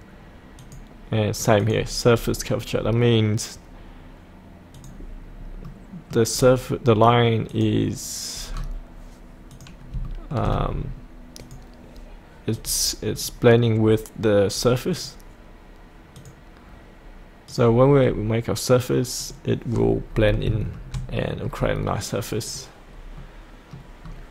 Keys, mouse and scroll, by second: 2.1-4.3 scroll down 1, 4.7 click, 5.4 scroll up 1, 5.6 middle click, 6.3-7.5 scroll down 1, 7.5 click, 8.5 scroll down 1, 9.5 click, 10.0 shift+middle click, 11.4 click, 13.2-15.0 scroll down 1, 15.0 click, 18.0-19.2 scroll down 1, 19.2 click, 19.7-20.1 scroll up 1, 20.5 shift+middle click, 22.5 click, 23.2 middle click, 24.0 scroll down 1.